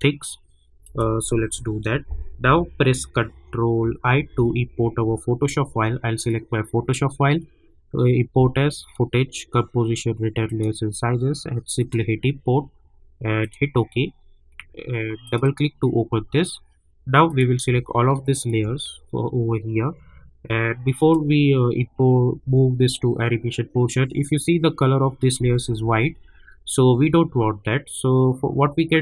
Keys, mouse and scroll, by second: 1.3 u, 4.3 ctrl+i, 6.2 click, 8.8 click, 11.9 click, 18.3 shift+click, 20.9 click.